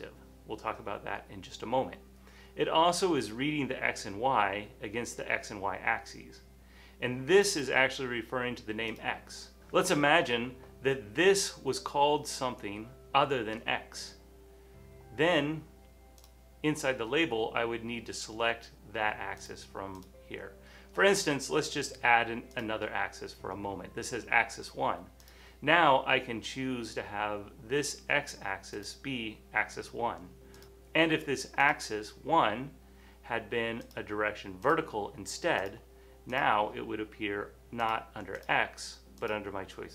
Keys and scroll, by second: 9.6 x, 12.0 typing.